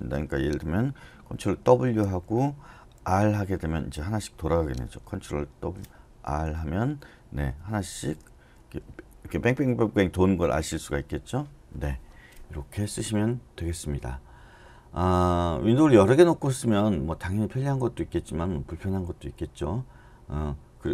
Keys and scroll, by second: 1.7 ctrl+w, 3.1 r, 5.4 ctrl+w, 6.3 r, 7.8 ctrl+w, 8.5 r, 10.2 ctrl+w, 10.7 r.